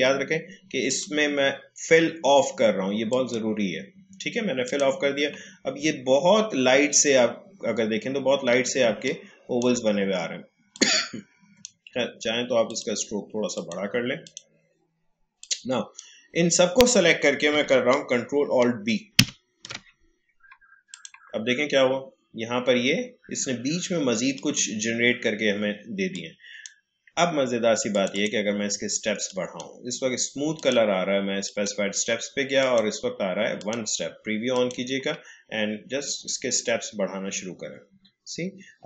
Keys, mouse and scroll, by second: 3.2 click, 5.9-6.2 alt+scroll up 1, 8.2-8.6 alt+scroll down 1, 9.3 space, 19.1 ctrl+alt+b, 20.9 click, 24.3-27.9 drag, 35.4 scroll up 1.